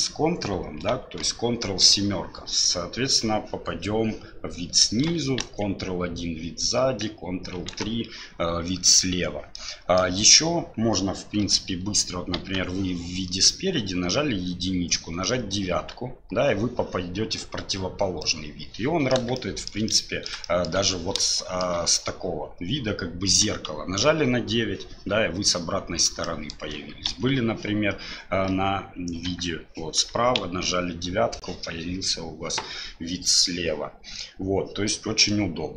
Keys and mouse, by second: 1.6 ctrl+KP_7, 5.4 ctrl+KP_1, 7.6 ctrl+KP_3, 9.5 click, 11.4 KP_7, 12.4 KP_1, 15.9 KP_9, 18.2 middle click, 19.4 shift+middle click, 19.9 middle click, 20.4 shift+middle click, 21.3 shift+click, 24.0 KP_9, 26.2 middle click, 27.1 KP_1, 28.5 KP_7, 29.3 KP_3, 30.4 KP_9, 35.3 middle click.